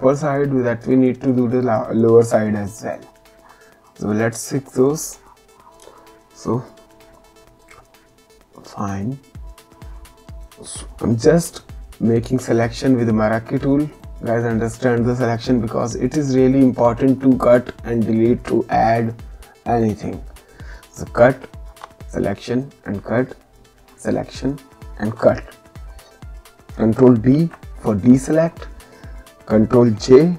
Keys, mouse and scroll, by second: 4.7 click, 11.1 m, 13.9 click, 17.2 click, 21.7 Delete, 23.3 click, 25.1 Delete, 27.3 ctrl+d.